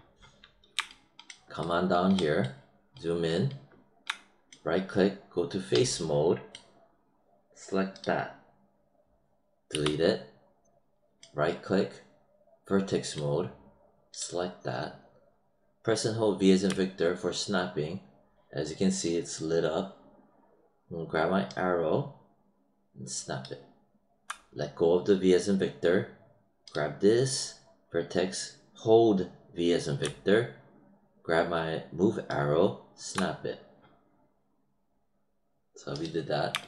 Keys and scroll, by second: 9.6 BackSpace, 16.6 v, 29.9 v.